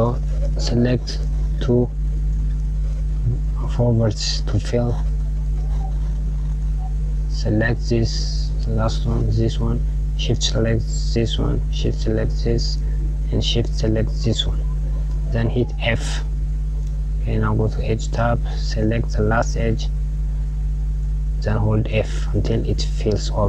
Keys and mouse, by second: 1.7 KP_Add, 3.4-5.1 drag, 7.3 click, 8.5 click, 10.8 shift+click, 11.8 shift+click, 13.4 shift+click, 15.3 f, 17.5 click, 19.5 click, 20.7-23.0 f.